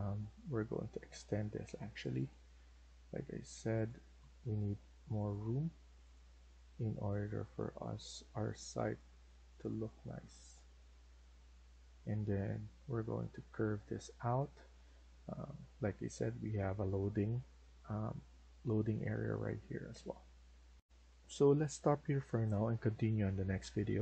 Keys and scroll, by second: 2.9 Escape, 10.3 Escape, 10.6 Escape, 10.9 Escape.